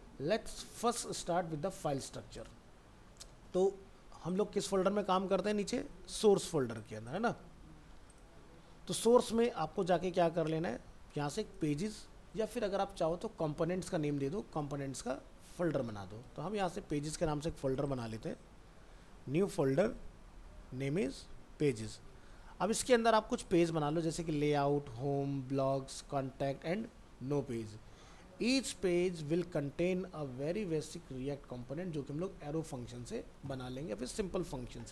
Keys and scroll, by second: 9.7 alt+Tab, 16.2 ctrl+c, 16.7 alt+Tab, 20.0 ctrl+v, 22.4 alt+Tab.